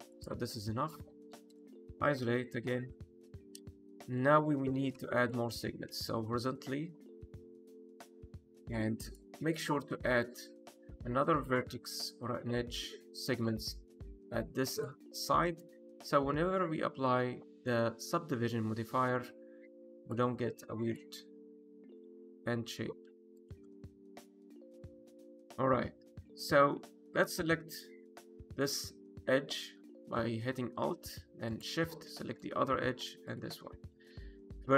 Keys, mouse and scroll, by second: 0.1 click, 0.7 click, 1.0 middle click, 1.4 click, 2.5 KP_Divide, 3.2 middle click, 3.8 shift+middle click, 4.0 middle click, 4.4 Tab, 4.9 2, 5.1 click, 6.0 ctrl+r, 8.6 right click, 8.9 click, 9.2 middle click, 9.6 scroll up 1, 9.9 shift+middle click, 10.6 click, 10.9 ctrl+r, 14.6 click, 15.5 click, 15.9 ctrl+r, 17.6 click, 18.0-18.4 scroll down 2, 18.4 middle click, 19.0 shift+middle click, 19.4-20.0 scroll up 1, 20.0 click, 20.3 ctrl+r, 23.3 click, 23.5 scroll down 1, 23.8 middle click, 24.3 shift+middle click, 24.6 middle click, 24.9 scroll up 1, 25.2 middle click, 25.7 middle click, 26.0 click, 26.7 2, 27.0 click, 27.6 alt+click, 31.4 alt+shift+click, 32.0 middle click, 33.2 alt+shift+click, 33.6 middle click, 34.0 1, 34.5 middle click.